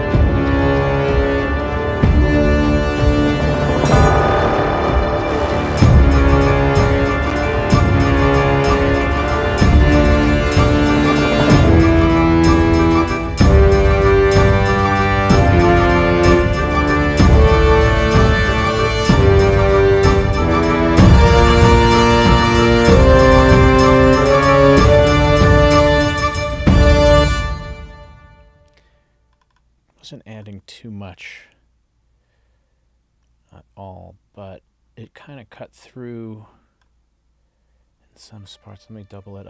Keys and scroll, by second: 27.1 space.